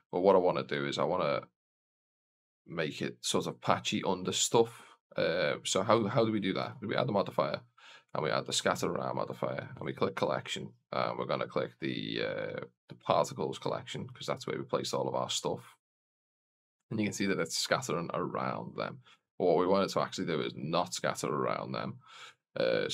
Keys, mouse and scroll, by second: 0.5 click, 0.5 scroll down 1, 6.4-8.5 drag, 9.7 click, 12.6-14.3 drag, 15.9 click, 19.4 scroll down 1, 20.6 click, 20.6 scroll down 2, 22.8-22.9 drag.